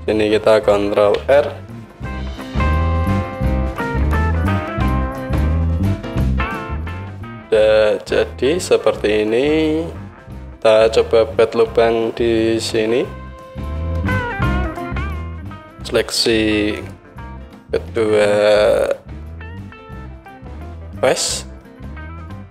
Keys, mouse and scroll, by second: 1.3 ctrl+middle click, 1.7 ctrl+r, 3.1 KP_1, 3.9 Tab, 4.5 click, 4.9 click, 12.7 Tab, 14.1-15.8 middle drag, 15.8-16.8 right drag, 16.8 shift+middle click, 16.9-18.7 shift+right drag, 18.7-22.5 middle drag.